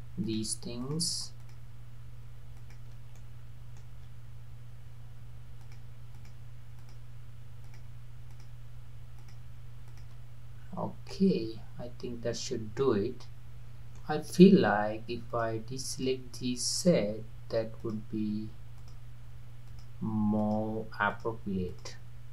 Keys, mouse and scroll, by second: 0.3 shift+click, 0.8 shift+click, 1.4 shift+click, 2.6 shift+click, 3.2-5.6 middle drag, 5.6 shift+click, 6.1 shift+click, 6.8 shift+click, 7.6 shift+click, 8.3 shift+click, 9.2 shift+click, 9.9 shift+click, 10.6-11.2 scroll up 3, 11.2-14.1 middle drag, 15.3 shift+click, 15.9 shift+click, 16.8 shift+click, 17.8 shift+click, 18.8 shift+click, 19.7 shift+click, 20.4 shift+click, 21.1 shift+click, 21.7 shift+click.